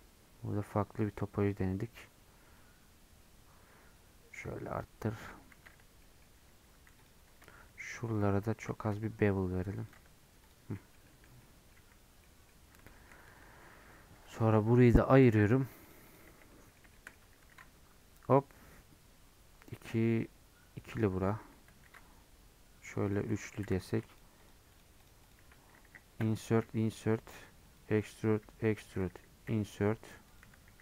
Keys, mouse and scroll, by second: 1.0-5.4 drag, 5.4 scroll up 1, 5.6 Tab, 6.0 middle click, 6.2 scroll up 1, 6.4 2, 7.0 alt+click, 8.2 alt+shift+click, 8.7 ctrl+b, 9.9 Tab, 10.1-10.7 scroll down 4, 10.7 middle click, 11.2 scroll up 2, 11.4 middle click, 12.0 scroll down 1, 12.2 middle click, 12.4 scroll up 2, 12.9 shift+middle click, 13.2 Tab, 14.3 click, 15.5 p, 15.7 Tab, 15.8 click, 16.2 Tab, 16.5 middle click, 17.1 scroll up 1, 17.5 ctrl+r, 21.8 ctrl+r, 23.6 3, 23.9 click, 24.5 shift+click, 25.1 shift+click, 26.2 i, 28.0 middle click, 28.3 e.